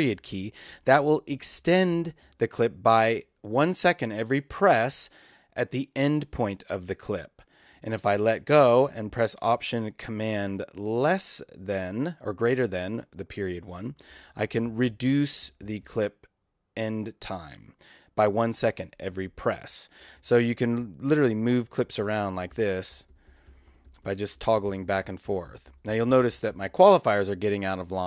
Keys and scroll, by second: 13.7 alt+super+., 20.0 alt+super+,, 21.1 alt+super+., 21.6 alt+super+,, 22.0 alt+super+., 22.1 alt+super+,, 22.3 alt+super+., 22.4 alt+super+,, 22.5 alt+super+., 22.6 alt+super+,, 22.7 alt+super+., 22.8 alt+super+,, 22.9 alt+super+., 23.0 alt+super+,, 23.1 alt+super+., 23.2 alt+super+,, 23.3 alt+super+., 23.4 alt+super+,, 23.5 alt+super+., 23.6 alt+super+,, 23.7 alt+super+., 23.7 alt+super+,, 23.9 alt+super+., 23.9 alt+super+,, 24.0 alt+super+., 24.1 alt+super+,, 24.3 alt+super+., 24.3 alt+super+,, 24.5 alt+super+., 24.5 alt+super+,, 24.7 alt+super+., 24.8 alt+super+,, 24.8 alt+super+., 24.9 alt+super+,, 25.0 alt+super+., 25.1 alt+super+,, 25.2 alt+super+., 25.3 alt+super+,, 25.5 alt+super+., 25.6 alt+super+,, 25.7 alt+super+., 25.7 alt+super+,, 25.9 alt+super+., 26.0 alt+super+,, 26.1 alt+super+., 26.2 alt+super+,, 26.3 alt+super+., 26.4 alt+super+,, 26.5 alt+super+..